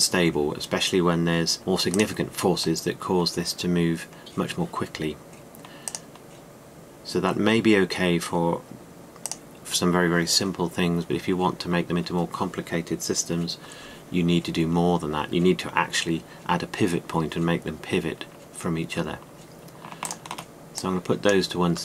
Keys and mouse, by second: 6.5 click.